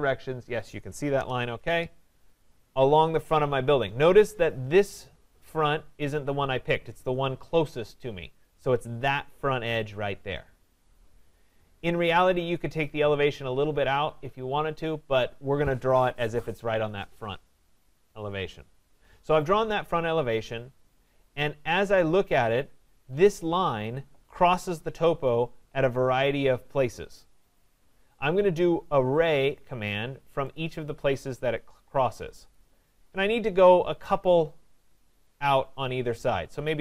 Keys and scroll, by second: 1.2 Return.